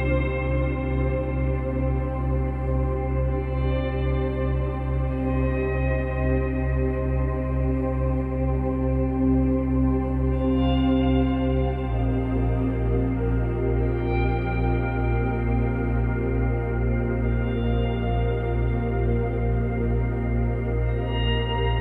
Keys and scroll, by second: 17.0 space.